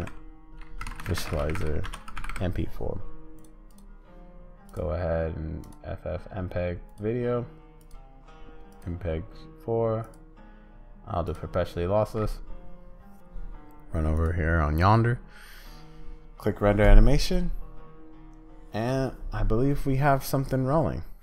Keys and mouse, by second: 4.7-7.0 drag, 7.8-8.8 drag, 10.1-11.3 drag.